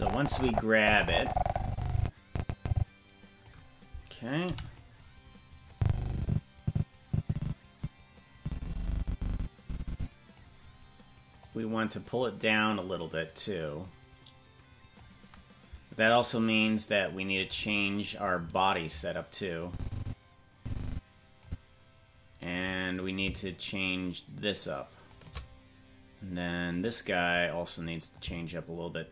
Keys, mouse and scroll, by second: 4.4 i, 5.7-10.4 drag, 11.4-15.0 drag, 17.5 right click, 19.6-21.5 drag, 23.2-25.1 drag, 26.8 right click, 28.2-29.1 shift+drag.